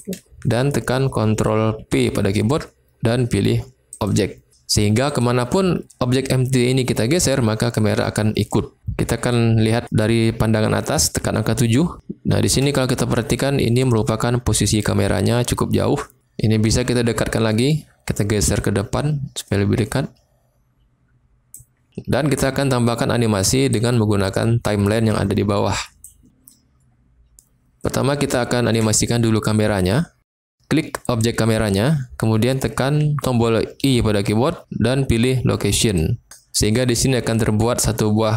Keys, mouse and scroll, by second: 1.7 ctrl+p, 5.1 click, 10.9 KP_7, 11.9-12.5 shift+middle drag, 13.6 click, 17.6 click, 18.6-21.4 drag, 23.6-26.0 drag, 28.0-28.4 shift+drag, 28.4 shift+middle click, 31.0 click, 33.8 i.